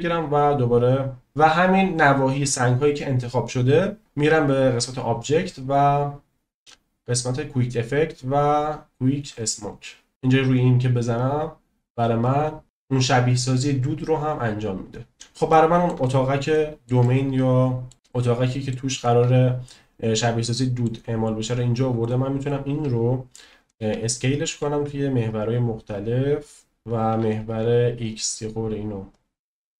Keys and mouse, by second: 5.9-7.5 drag, 12.9 click, 15.5-15.8 shift+middle drag, 16.5-16.8 shift+middle drag, 17.0-17.9 middle drag, 18.0-18.7 middle drag, 18.9-20.8 middle drag, 22.4 click, 23.6 s, 23.9 x, 24.5 z, 26.8 y, 27.2 x, 29.3 right click.